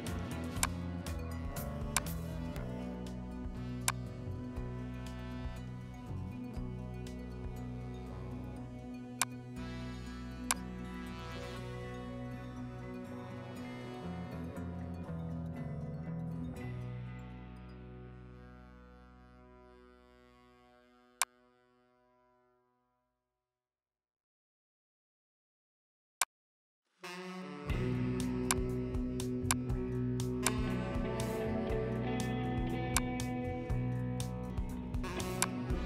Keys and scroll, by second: 20.1 ctrl+t.